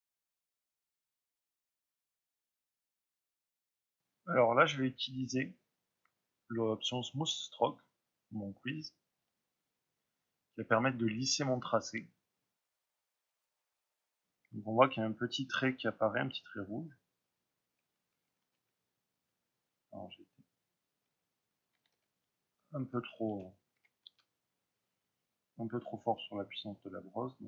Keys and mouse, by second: 0.1 middle click, 0.2 drag, 0.5 middle drag, 0.8 click, 0.9 middle drag, 1.0-1.4 shift+drag, 1.4 ctrl+middle click, 2.0-2.4 shift+drag, 2.4-5.0 middle drag, 3.2 click, 5.0-13.7 drag, 13.4 Return, 13.7 middle drag, 13.9-19.1 drag, 18.5 ctrl+z, 19.1-20.5 middle drag, 20.5-27.2 drag, 26.0 f.